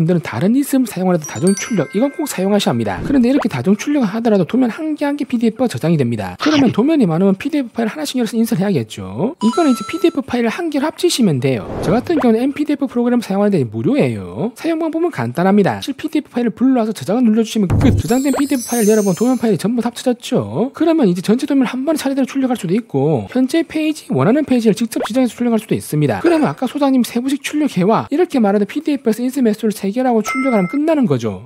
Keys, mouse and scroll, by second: 3.7 click, 3.8 click, 6.4 click, 7.1 click, 7.5 click, 8.3 click, 13.1 click, 14.1 click, 14.5 click, 15.0 shift+click, 15.6 click, 18.3 click, 18.7 click, 19.1 click, 19.6 click, 20.0 click, 20.4 click, 20.7 click, 21.1 click, 21.4 click, 21.9 click, 22.4 click, 22.8 click, 23.3 click, 23.7 click, 24.2 click, 24.7 click, 25.0 3, 26.1 click, 27.5 click, 28.0 click.